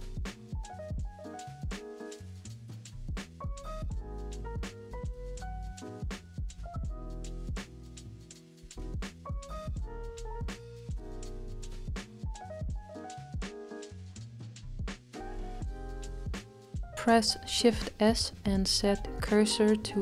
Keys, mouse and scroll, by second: 2.2-3.0 scroll down 3, 3.0-9.3 middle drag, 9.5 click, 10.2 scroll down 1, 10.3 shift+middle click, 10.7-11.1 scroll down 2, 16.2 shift+s.